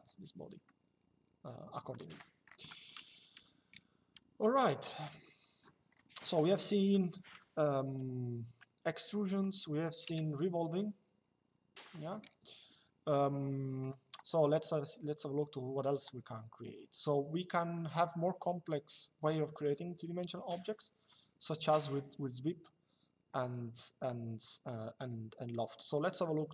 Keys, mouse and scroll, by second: 0.3 shift+middle click, 8.6 click, 9.7 Delete, 11.5 click, 13.5 click, 25.7 click.